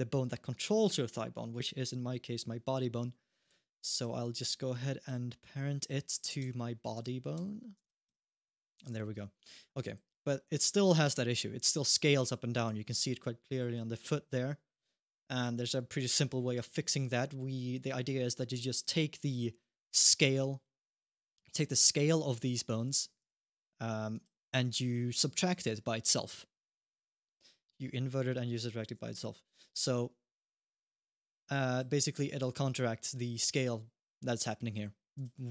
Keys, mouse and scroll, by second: 1.4 click, 3.3 alt+g, 3.7 click, 4.8 click, 5.1-6.1 scroll down 3, 6.2 Tab, 6.7 click, 7.9 Tab, 8.1 click, 8.6 g, 9.5-10.3 scroll up 1, 10.3 click, 13.5 click, 16.5 alt+g, 17.1-18.6 scroll up 1, 19.0-19.7 scroll up 1, 19.7 click, 20.4-20.7 scroll down 1, 20.7 middle click, 22.6 click, 23.0 g, 24.5 click, 27.2 scroll up 1, 27.6 middle click, 29.3 scroll down 1, 30.7 click, 31.5 click, 34.9 click, 35.3 alt+g.